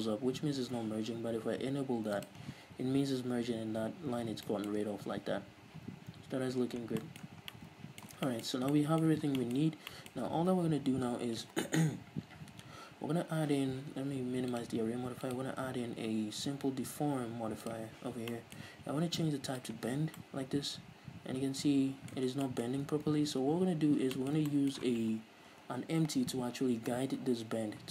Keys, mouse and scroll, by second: 2.4-4.6 drag, 4.0 scroll down 2, 4.3 z, 4.6-14.7 middle drag, 5.0 scroll down 2, 5.2 z, 5.6 scroll up 2, 5.9 z, 6.2-6.6 scroll up 2, 6.6-7.2 scroll down 4, 6.7 z, 7.5 scroll down 2, 8.8 scroll down 2, 9.3 scroll up 1, 9.8 scroll up 1, 10.8 ctrl+s, 14.7-18.5 drag, 18.5-19.9 middle drag, 19.9 click, 20.4-27.9 middle drag, 22.5 scroll down 2, 22.9-23.3 scroll up 2, 23.3 ctrl+s, 23.9-24.3 scroll up 2, 26.2 KP_1, 26.7-27.4 scroll down 2, 27.4 KP_3.